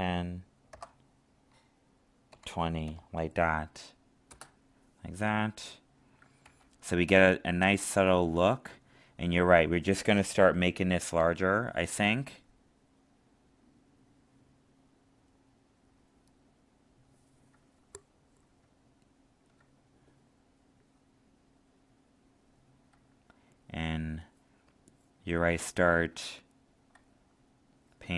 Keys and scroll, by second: 6.4 ctrl+alt+z.